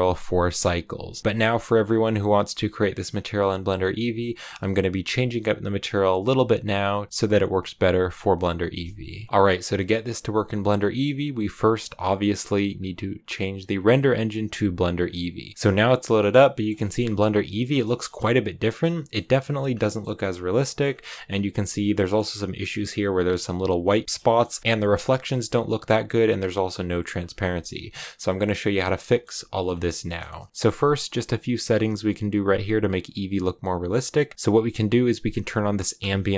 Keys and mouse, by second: 9.2 ctrl+s, 12.6-14.7 drag, 15.7 shift+click, 16.1 middle click, 16.4 click, 16.7 shift+middle click, 17.1 middle click, 17.7 shift+middle click, 18.1 middle click, 18.8 shift+middle click, 19.1 middle click, 19.7 shift+middle click, 20.0 middle click, 21.1 middle click, 23.7 middle click, 24.1 shift+middle click, 24.4 middle click, 24.6 KP_0, 25.0 shift+middle click, 26.7 click, 28.3 click, 29.0 middle click, 29.4 middle click, 30.2 middle click, 35.2 click, 35.9 click.